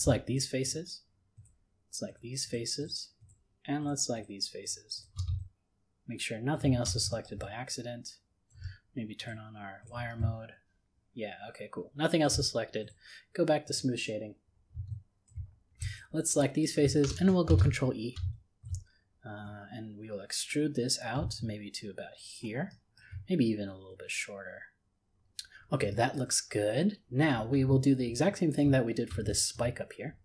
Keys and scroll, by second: 17.5 ctrl+e.